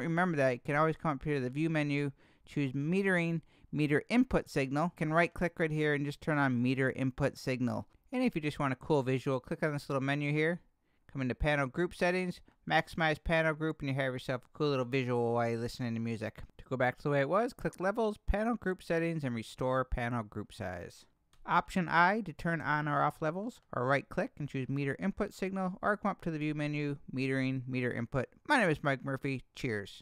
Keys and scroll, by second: 21.3 alt+i, 22.6 alt+i.